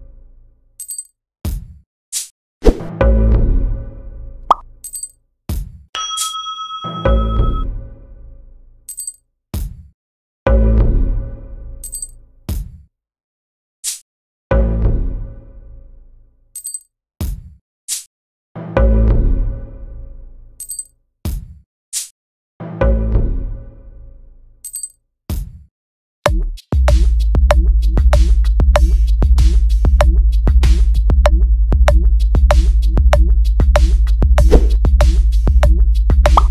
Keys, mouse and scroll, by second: 1.2 click, 1.5 click, 2.1 click, 2.8-4.1 drag, 5.1 click, 6.0-7.8 drag, 7.7 right click, 8.8 shift+click, 9.2-10.7 drag, 10.6 right click, 11.7 click, 12.2 click, 14.1 click, 15.1 click, 16.3 click, 16.9 click, 17.5 shift+click, 19.4 click, 20.5 shift+click, 20.9 shift+click, 22.3 click, 24.5 click, 30.7 click, 31.8 click, 34.6 click, 35.1 click, 35.7 click, 36.1 click.